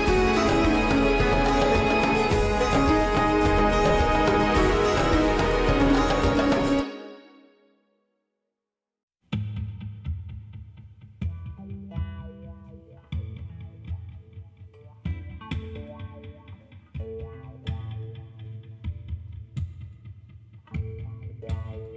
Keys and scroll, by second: 14.5 ctrl+alt+0.